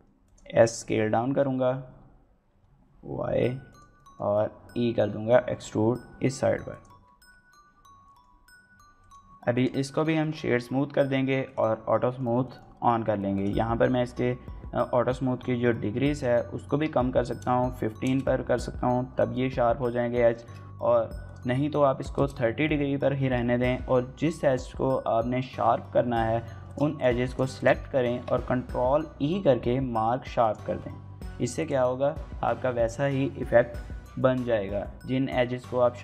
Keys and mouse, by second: 0.0 click, 0.4 middle click, 0.7 s, 2.3 y, 3.5 click, 3.7 middle click, 4.1 e, 6.5 click, 6.7 Tab, 7.3-8.1 middle drag, 9.0 right click, 10.0 shift+middle click, 11.2 click, 11.9 shift+middle click, 12.2 middle click, 13.2-18.5 drag, 20.2 shift+middle click, 21.1-22.5 drag, 23.5 middle click, 25.6 Tab, 26.2 2, 26.5 click, 26.8 shift+click, 27.0 shift+click, 27.3 shift+click, 27.9 ctrl+e, 30.9 Tab, 31.4-31.8 drag, 31.8 middle click.